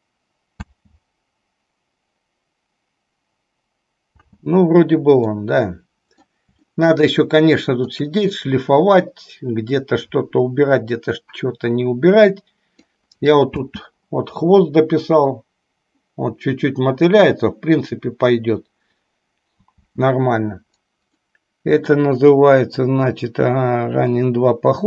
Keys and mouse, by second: 0.8 space, 4.5 space, 5.6-6.6 middle drag, 7.0-8.2 shift+middle drag, 11.3-13.2 middle drag, 13.8 space, 20.1 space, 21.4 middle click.